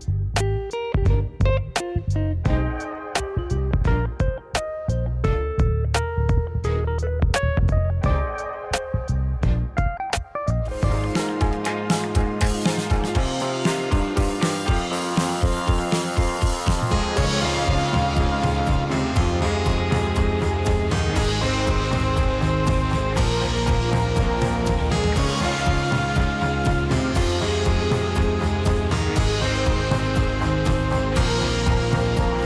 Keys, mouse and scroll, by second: 0.1 scroll up 1, 0.3-1.0 middle drag, 1.0 click, 1.8 Tab, 2.2 middle click, 3.1 click, 3.4 middle click, 3.9 click, 4.7 click, 6.1 g, 8.4 click, 9.2 g, 12.0 click, 12.1-14.0 middle drag, 14.0 click, 14.5 Tab, 14.7 middle click, 15.2 click, 16.0 s, 17.9 alt+d, 23.6 s, 25.5 click, 25.7-29.5 middle drag, 29.5 click, 30.1 shift+drag, 30.4 shift+drag, 30.6 shift+drag, 32.1 g.